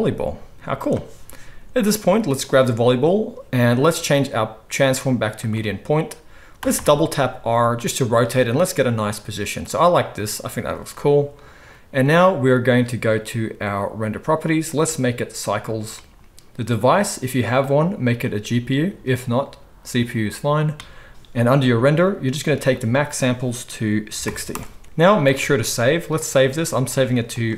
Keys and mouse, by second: 1.8-3.9 drag, 6.6 r, 9.8-14.0 drag, 14.1-14.7 drag, 21.1-27.5 drag, 25.3 ctrl+s.